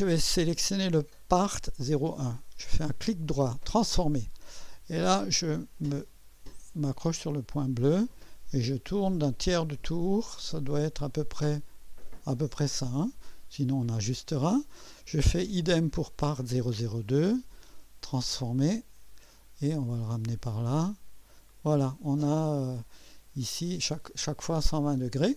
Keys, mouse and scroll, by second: 2.9 right click, 3.7 click, 5.7-12.9 drag, 13.8 click, 15.5 click, 16.2 right click, 17.6 click, 19.3-21.7 drag.